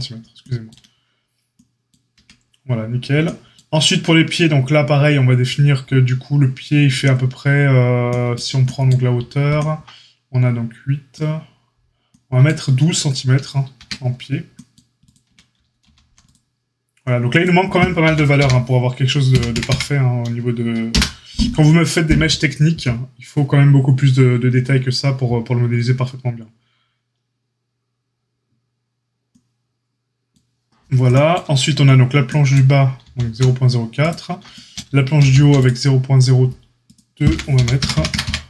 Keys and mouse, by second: 2.1 Tab, 15.2 Tab, 15.8 ctrl+r, 18.0 g, 32.9 ctrl+r, 35.1 ctrl+r, 37.2 g.